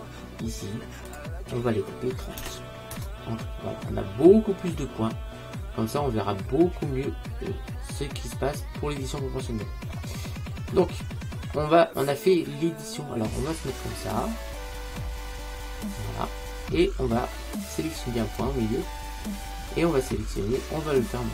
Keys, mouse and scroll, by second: 1.2 click, 4.7-6.7 middle drag, 10.9 middle click, 13.0-15.4 middle drag, 18.3-20.1 right drag, 20.5 click.